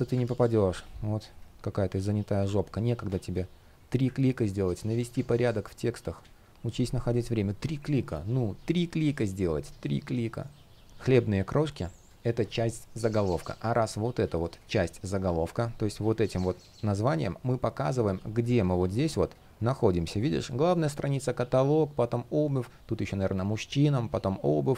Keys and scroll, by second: 0.4 shift+p, 4.5 super+z, 4.8 super+v, 5.9 super+z.